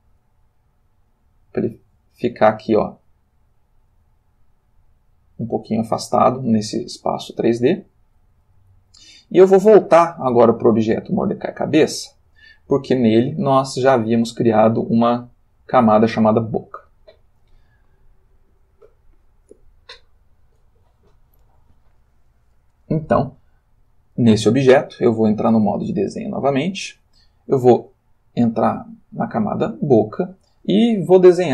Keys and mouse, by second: 0.1-1.5 drag, 1.5-6.6 middle drag, 7.6 click, 8.7 ctrl+middle click, 11.1 click, 25.3 click, 26.7 click, 28.4 click.